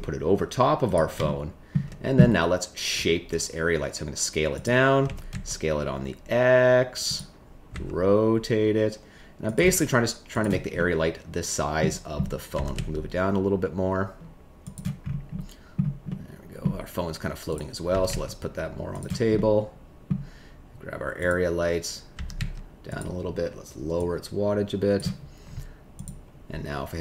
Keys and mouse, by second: 1.2 shift+middle click, 2.9 s, 5.0 s, 5.3 x, 7.7 r, 9.5 g, 10.7-11.7 middle drag, 12.5 g, 12.7 z, 15.6 middle click, 16.0 middle click, 17.9 g, 18.0 z, 18.9 click, 19.3 middle click, 22.1 g, 22.3 z, 22.8 click, 23.9-24.9 drag, 25.9 click.